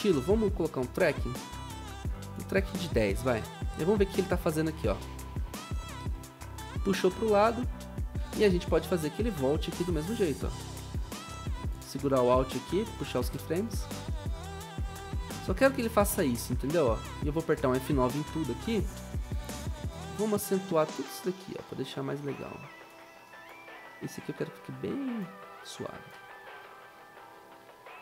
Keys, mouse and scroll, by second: 3.3 Return, 9.4 ctrl+c, 9.7 ctrl+v.